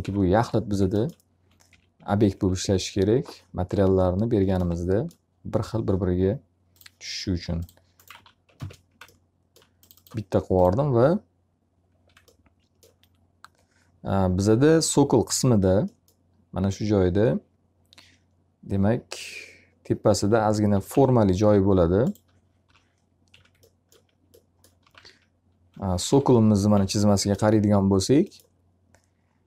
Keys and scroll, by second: 7.7 alt+a, 8.5 ctrl+space, 20.2 f, 20.8 z, 22.6 l, 23.2 z, 24.5-26.7 typing.